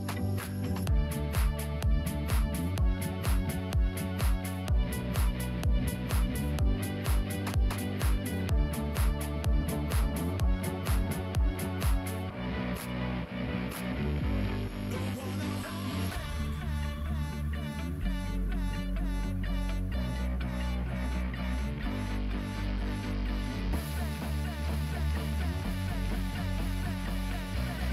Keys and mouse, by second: 0.1 shift+middle click, 1.1 g, 3.8 1, 5.2 ctrl+z, 6.2 Tab, 7.2-8.7 drag, 9.0 click, 10.3 s, 13.7 g, 15.6 click, 16.6 g, 18.1-19.2 drag, 19.7 s, 27.5 g.